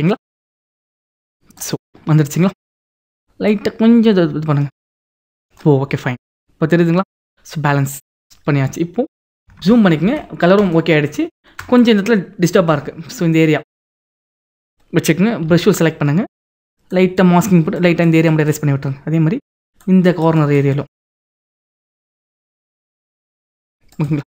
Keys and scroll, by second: 9.7 ctrl+=, 10.3 ctrl+=, 12.9 ctrl+=.